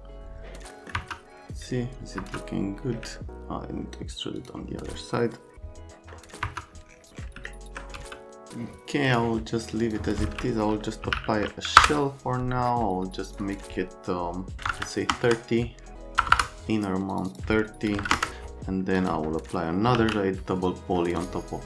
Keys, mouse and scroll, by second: 0.7 right click, 1.0 F3, 2.2 F3, 3.2 alt+middle click, 4.4 click, 6.2 right click, 6.4 F3, 7.5 alt+middle click, 7.9 c, 9.1 click, 9.8 click, 10.8-11.6 typing, 11.8 Return, 14.6 KP_3, 14.6 KP_0, 15.1 KP_Enter, 16.2 BackSpace, 16.3 BackSpace, 17.1 KP_Divide, 17.3 KP_Divide, 17.9 KP_3, 18.0 KP_0, 18.1 KP_Enter, 18.9 click, 19.6-20.4 typing, 21.2 click.